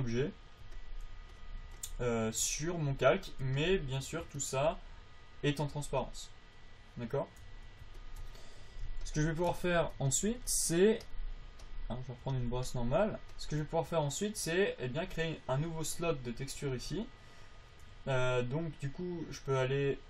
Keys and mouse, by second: 0.1 f, 2.6 f, 14.9-17.1 middle drag.